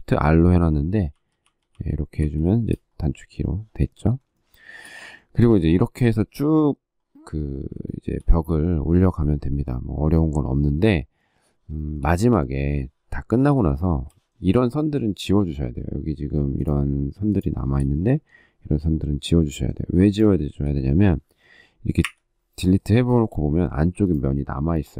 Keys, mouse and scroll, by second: 0.9 shift+r, 4.2 shift+middle click, 5.5 shift+middle click, 5.8 shift+middle click, 7.6 shift+middle click, 11.6 shift+middle click, 13.5 shift+middle click, 17.1 shift+click, 17.3 shift+middle click, 20.2 shift+middle click, 21.8 Delete, 22.9 shift+middle click.